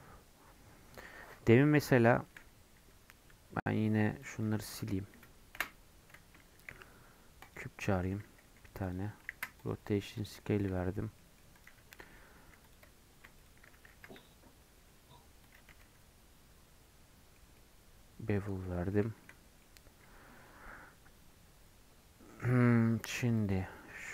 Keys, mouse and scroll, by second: 1.1-1.6 scroll down 6, 1.7 middle click, 2.4 scroll up 1, 4.2 click, 5.5 Delete, 6.5 shift+a, 8.0 s, 9.2 ctrl+a, 9.8 middle click, 10.1 click, 10.3 middle click, 10.9 scroll up 1, 11.1 middle click, 11.5 click, 12.0 Tab, 12.3 2, 12.6-13.8 drag, 13.8 ctrl+b, 15.6 Tab, 15.8-18.4 middle drag, 18.4 scroll down 1, 18.7 middle click, 19.1 shift+scroll up 1, 21.3-23.3 shift+middle drag, 23.3 click, 23.6 Tab.